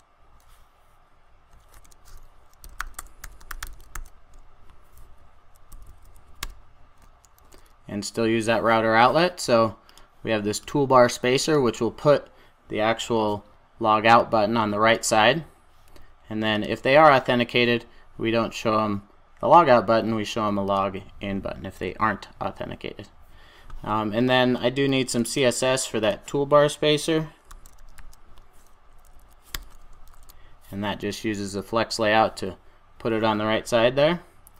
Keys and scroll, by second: 1.7 super+a, 2.5 super+a, 6.2 super+j, 7.3 super+s, 7.4 super+a, 29.5 Return, 30.1 super+s.